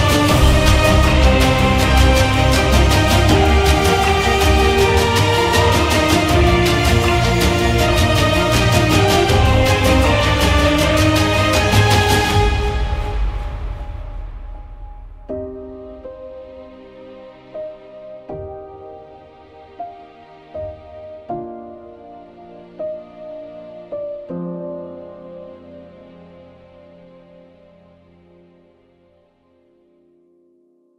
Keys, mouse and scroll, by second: 0.1 click, 0.3 click, 0.3 click, 0.5 click, 0.8 ], 1.0 ], 1.0 click, 1.3 click, 1.4 click, 1.7 click, 1.8 click, 2.0 click, 2.3 click, 2.7 [, 2.9 click, 3.2 click, 3.8 scroll, 5.2 ctrl+0, 7.3 click, 8.4 click.